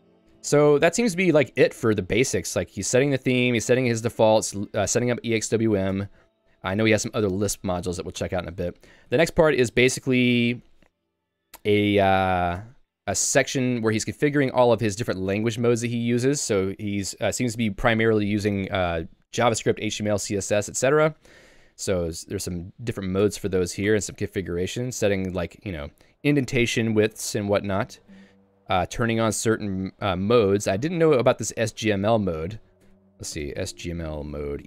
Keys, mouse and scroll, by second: 1.0 Tab, 2.9 Tab, 3.4 k, 4.8 k, 5.2 j, 5.9 Tab, 8.2 Tab, 8.9 j, 12.6 Tab, 23.3 Tab, 23.6 j, 23.9 Tab, 25.5 j, 26.6 k, 29.5 j, 30.6-32.0 typing.